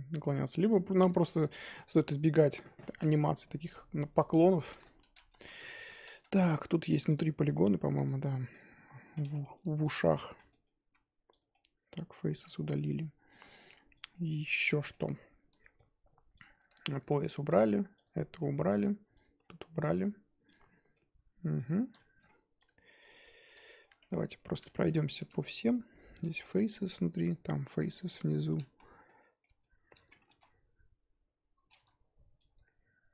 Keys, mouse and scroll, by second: 0.5-1.4 scroll up 4, 1.4-4.2 middle drag, 4.2 click, 4.4-4.7 shift+middle drag, 4.7 Tab, 5.1 z, 5.2 shift+middle drag, 5.5-5.9 scroll up 1, 6.1 a, 6.4 scroll up 1, 6.4 middle click, 7.1 click, 7.3-8.6 middle drag, 8.6 ctrl+click, 9.0 ctrl+z, 9.3-9.9 middle drag, 9.9 ctrl+click, 10.3 z, 10.5-11.4 middle drag, 11.4 x, 11.5 scroll down 1, 11.5-12.5 middle drag, 12.5 scroll down 3, 12.7 Tab, 12.9-13.6 middle drag, 13.6-14.0 scroll down 3, 14.0 click, 14.1-15.0 middle drag, 15.0-15.6 scroll up 1, 15.6-16.4 shift+middle drag, 16.4 click, 16.6-17.5 shift+middle drag, 17.5 click, 18.0 click, 18.4-19.2 middle drag, 19.2 click, 19.4 scroll down 2, 19.6-20.0 middle drag, 20.0 click, 20.9-21.7 middle drag, 21.7 scroll down 2, 21.9-22.3 shift+middle drag, 22.3-22.6 scroll up 1, 22.6 click, 23.0 click, 23.2-23.9 middle drag, 23.9-24.5 scroll up 6, 24.0 Tab, 24.5 z, 24.6 shift+middle drag, 24.9-25.7 scroll up 1, 25.7 click, 26.4 x, 27.3 click, 28.0 x, 28.3-28.7 shift+middle drag, 28.7 z, 28.9 scroll down 2, 29.0-30.0 middle drag, 30.0 scroll up 2, 30.3 1, 32.5 click.